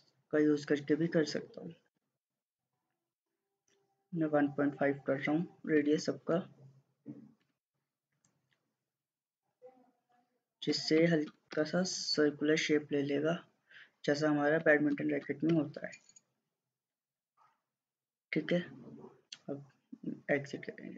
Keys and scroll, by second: 1.8-3.0 typing, 3.2 Return, 5.8-6.1 typing, 7.5 typing, 7.7 Return, 10.7-11.3 typing, 11.6 Return, 14.6-15.2 typing, 15.5 Return.